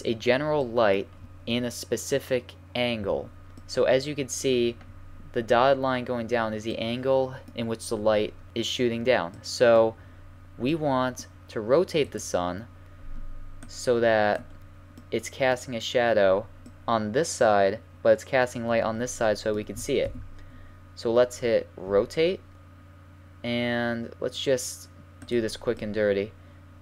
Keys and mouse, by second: 7.2-8.5 middle drag, 9.3-11.2 middle drag, 12.0-14.9 drag, 13.6 right click, 13.7 middle click, 14.9-17.1 middle drag, 20.0 KP_7, 21.8 r, 25.7-26.5 middle drag.